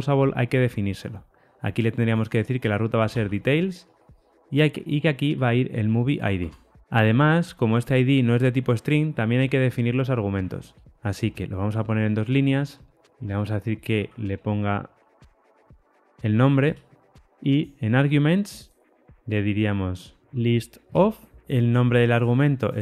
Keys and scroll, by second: 5.2 Tab, 13.2 alt+Return, 14.9 super+z, 15.6 alt+Return.